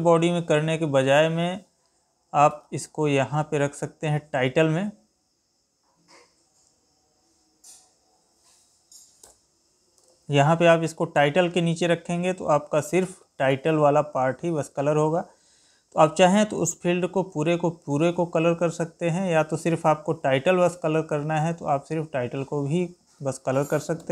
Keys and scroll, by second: 2.4 ctrl+x, 9.9 ctrl+v, 18.8 Escape, 23.9 alt+p.